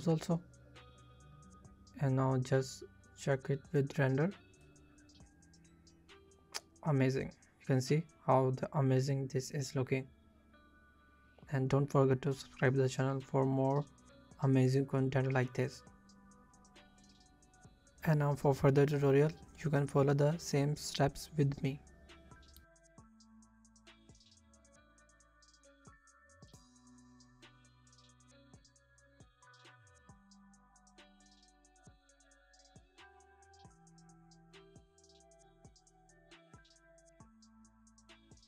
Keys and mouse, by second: 0.6 click, 1.7 shift+click, 2.3 KP_0, 11.0 shift+drag, 12.3 shift+click, 19.4 shift+click, 20.2 Tab, 20.5 click, 21.5 Tab, 21.9 b, 22.6 click, 25.5 middle click, 26.5 middle click, 28.0-29.4 middle drag, 31.8 shift+middle click, 33.2 z, 34.2 shift+drag, 34.8 shift+middle drag, 36.8 click, 37.1 click, 37.7-38.4 drag.